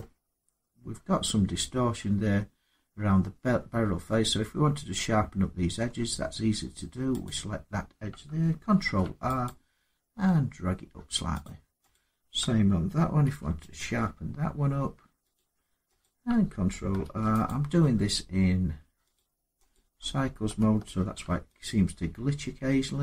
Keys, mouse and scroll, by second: 0.0 scroll, 5.5 Tab, 7.0 click, 8.5 ctrl+r, 9.2 click, 11.2 click, 11.7 click, 13.0 ctrl+r, 13.5 click, 15.1 click, 15.8 click, 16.8 ctrl+r, 17.2 click, 18.9 click, 19.5 click, 20.7 ctrl+r, 21.4 click.